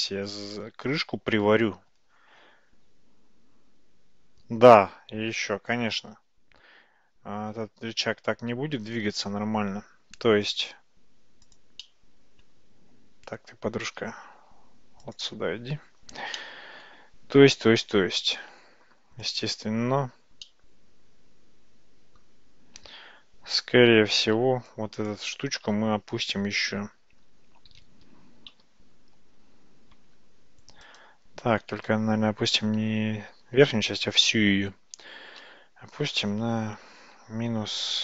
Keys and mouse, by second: 0.0 middle click, 10.5 click, 11.9-12.5 middle drag, 14.4 g, 16.4-16.9 middle drag, 19.3 click, 20.5-22.2 middle drag, 22.8 Tab, 24.2 alt+z, 24.8 click, 27.7 g, 32.0 Tab, 35.4 g.